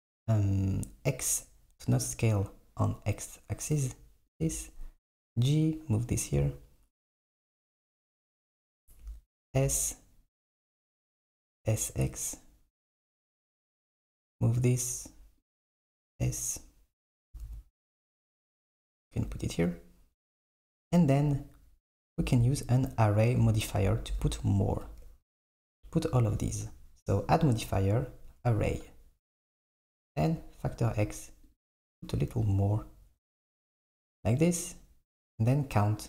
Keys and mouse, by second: 4.6 g, 11.2 s, 13.3 g, 16.1 s, 17.4 s, 22.1 s, 23.8 KP_7, 29.0-30.4 drag, 31.0-36.0 drag.